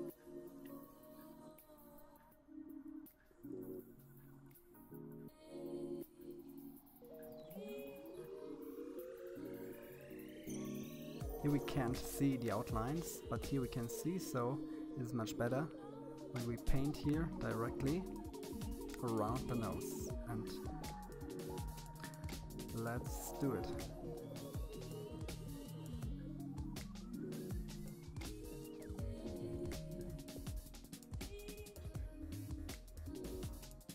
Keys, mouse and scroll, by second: 0.4-1.0 scroll up 1, 1.0-2.4 scroll up 1, 9.7 click, 12.5 click, 15.6-16.4 scroll up 2, 16.4-17.8 scroll down 1, 19.6-21.0 drag, 22.0-23.4 scroll down 1, 24.1-25.3 scroll up 1, 25.3 scroll up 1, 25.3-27.3 drag, 30.2-31.1 scroll down 2, 31.1-31.6 scroll down 1, 32.2-33.1 scroll up 2, 33.1-33.9 middle drag.